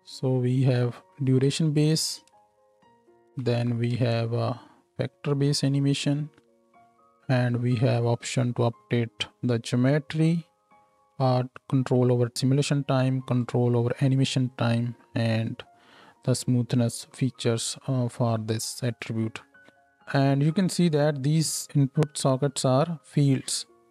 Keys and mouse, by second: 2.3 space, 2.8 middle click, 3.0-8.1 drag, 3.5 shift+Left, 3.9 space, 8.1-19.0 middle drag, 17.0 space, 19.0 click, 19.7-23.9 middle drag.